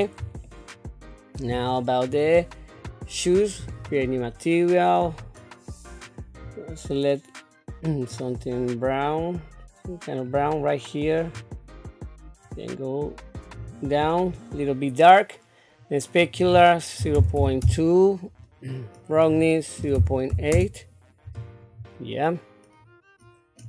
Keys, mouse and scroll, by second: 0.4 shift+middle click, 2.1 click, 3.6 click, 5.0 click, 16.2-17.6 drag, 19.1-20.5 drag, 21.9-23.6 middle drag.